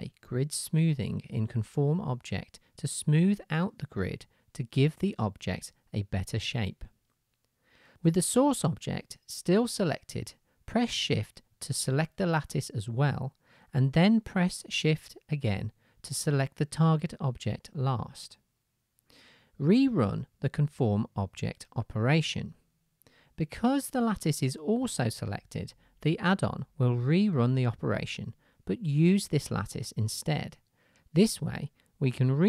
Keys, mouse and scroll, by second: 7.8-21.9 middle drag, 21.9-32.4 drag.